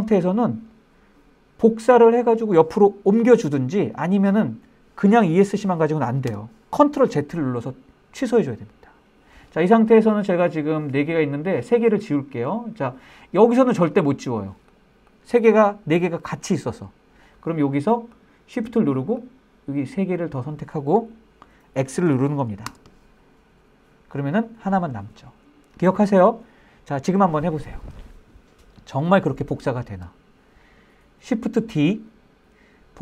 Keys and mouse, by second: 5.5 Escape, 12.8 click, 13.1 click, 13.9 click, 18.5-21.3 shift+drag, 22.0 x, 23.7 click.